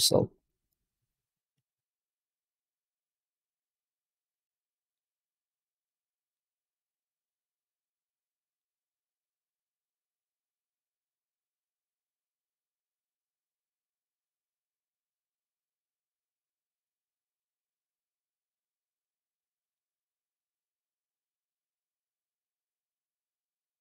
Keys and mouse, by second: 0.0 ctrl+space, 1.5 z, 4.8 middle click, 7.5-8.5 middle drag, 10.3-11.2 drag, 11.8 click, 12.2-13.1 drag, 16.9-20.3 middle drag, 21.8 z, 21.8 z.